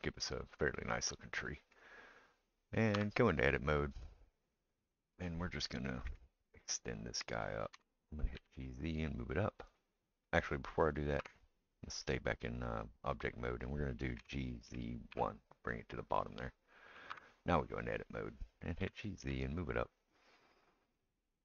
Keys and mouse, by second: 2.9 Tab, 5.0-21.4 middle drag, 6.1 KP_1, 7.7 g, 11.2 Tab, 14.2 g, 17.1 Tab, 18.8 g.